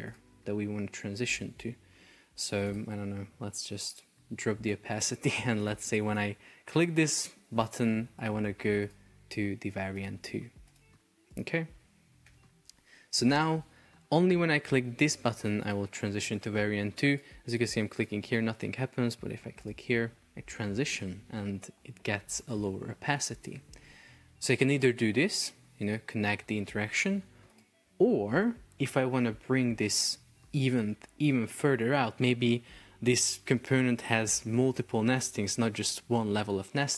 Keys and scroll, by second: 5.9 space, 12.3 super+p, 21.7 Escape, 23.5 BackSpace.